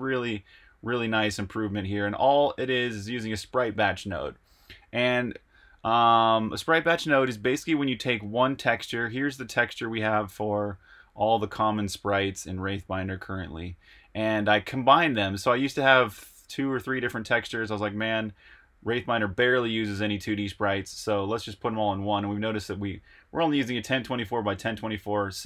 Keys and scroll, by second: 4.6 super+Tab.